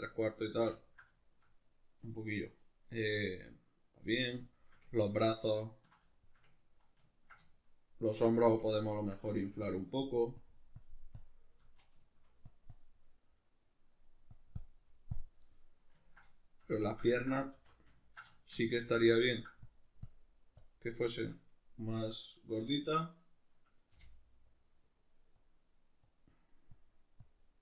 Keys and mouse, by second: 10.1-12.1 drag, 11.6 z, 12.1 shift+middle click, 12.5 click, 13.1-14.3 middle drag, 14.3-15.5 drag, 15.5-19.6 middle drag, 17.5 alt+q, 18.7 z, 19.6-21.0 drag, 21.0-24.5 shift+middle drag, 23.9 g, 24.5-27.6 drag.